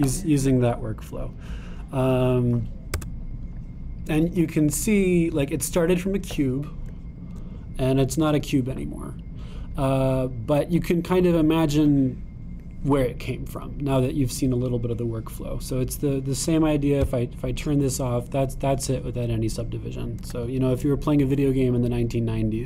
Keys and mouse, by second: 3.9 Tab, 4.6-5.9 drag, 5.9-6.9 middle drag, 6.9-9.2 drag, 9.2-10.9 middle drag, 10.9-13.4 drag, 13.4-15.1 middle drag, 15.1-16.6 drag, 16.6-18.1 right drag, 21.3 Tab.